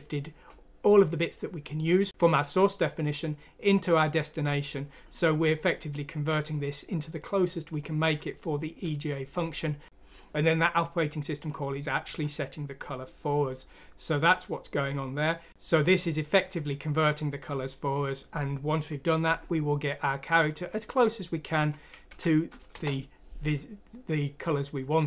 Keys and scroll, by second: 22.0 F6, 22.7 Return.